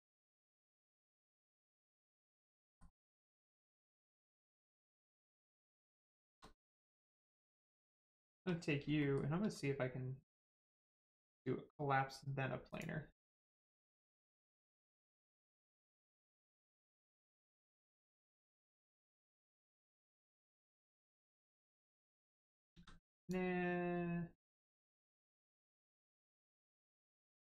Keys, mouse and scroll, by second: 1.4 scroll down 1, 2.0 middle click, 2.6 shift+middle click, 3.0 scroll down 1, 3.7 click, 4.1 middle click, 6.1 shift+middle click, 6.4 middle click, 6.4 middle click, 6.8 shift+middle click, 7.1 middle click, 7.2 middle click, 7.8 click, 8.2 shift+middle click, 8.4 scroll up 1, 9.0 shift+middle click, 12.6 click, 14.8 click, 17.4 click, 22.7 ctrl+z, 23.2 click, 26.6 click.